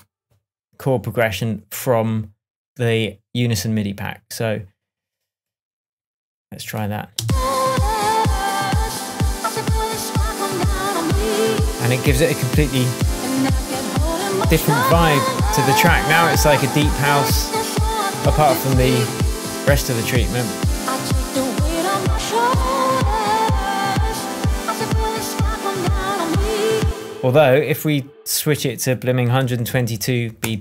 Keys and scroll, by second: 7.1 space, 12.9 super+d, 26.8 space, 29.1-29.9 typing, 30.4 Return.